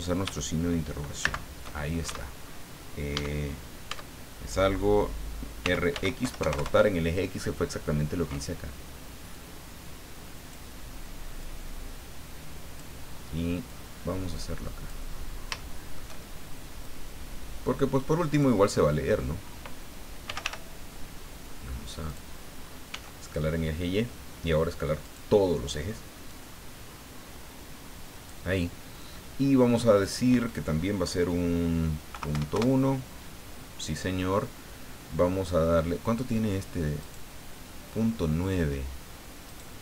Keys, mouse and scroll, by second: 1.2 shift+/, 2.0 shift+Caps_Lock, 3.1 Caps_Lock, 3.9 Tab, 5.6 r, 5.9 x, 6.2 KP_9, 6.4 KP_0, 6.5 KP_Enter, 9.3-10.7 drag, 11.4-13.0 drag, 13.7-15.1 drag, 15.2 scroll down 2, 15.6 shift+middle click, 16.8-18.6 drag, 20.2 g, 20.4 y, 22.1 click, 22.9 s, 25.0 click, 26.3-28.5 drag, 30.0 click, 32.1 KP_Decimal, 32.3 KP_1, 32.5 KP_Enter, 37.0 right click, 39.4 right click.